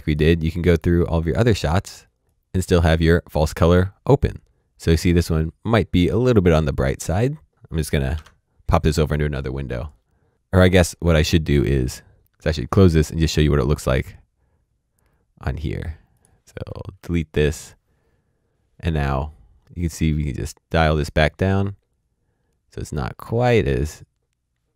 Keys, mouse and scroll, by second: 6.7 click, 8.6 Tab, 9.0 click, 10.3 s, 10.6 click, 12.2 click, 16.1 click, 16.9 Delete, 17.5 click, 20.5-23.4 scroll down 1.